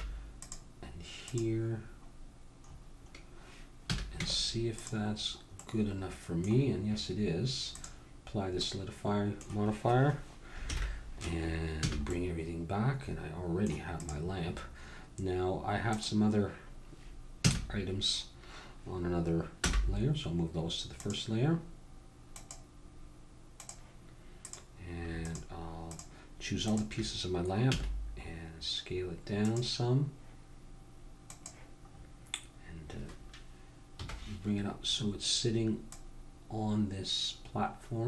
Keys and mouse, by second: 3.9 a, 4.1 Tab, 7.7 click, 8.6-10.7 middle drag, 10.7 alt+h, 11.9 a, 13.9 middle click, 14.0-17.7 drag, 17.4 a, 19.6 m, 22.3-28.5 drag, 27.7 s, 31.3-33.0 drag, 33.0 middle click, 33.9 KP_1, 35.9-37.2 drag, 37.6-38.0 drag.